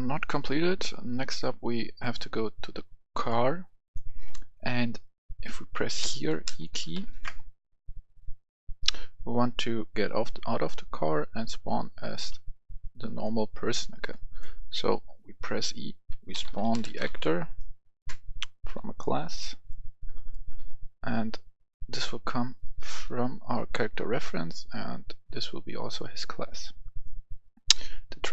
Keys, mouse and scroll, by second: 0.6 scroll down 1, 1.1 right click, 2.0 click, 2.9 right click, 3.8 click, 4.8 right click, 6.0-6.9 typing, 7.5-8.0 scroll up 1, 8.8 scroll up 1, 10.2 scroll up 1, 12.3 scroll down 1, 13.1 click, 14.1 right click, 15.4 click, 16.3-17.0 typing, 18.6 click, 20.3 right click, 21.8-26.9 drag, 27.0 right click, 28.1 click.